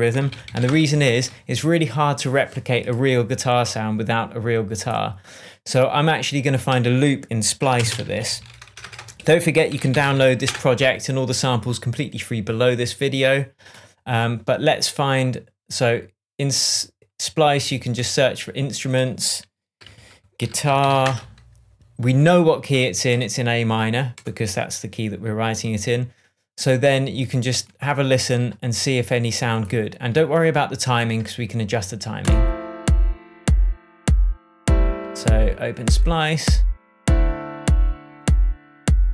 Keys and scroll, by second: 0.0-1.0 typing, 7.7 alt+space, 7.8-10.6 typing, 19.7-21.4 typing.